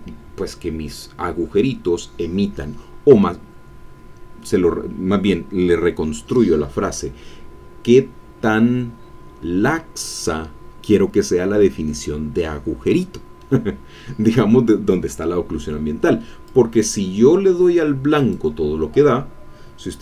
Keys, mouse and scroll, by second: 16.4-18.5 drag.